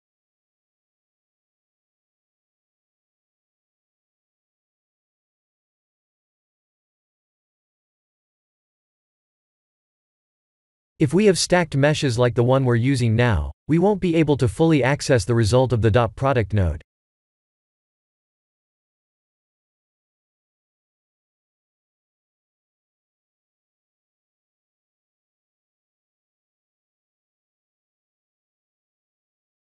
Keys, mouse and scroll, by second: 3.2-4.4 shift+middle drag, 9.0-9.8 shift+middle drag, 11.9-12.8 middle drag, 15.7-16.8 middle drag, 17.1-17.9 shift+middle drag, 18.1 KP_0, 19.9 shift+`, 20.6 s, 20.7-23.4 s, 23.8-24.8 e.